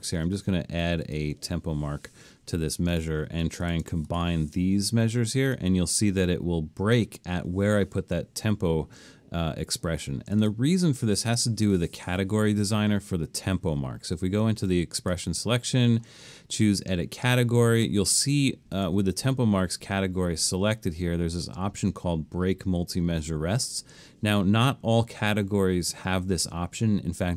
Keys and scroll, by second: 2.4 Escape.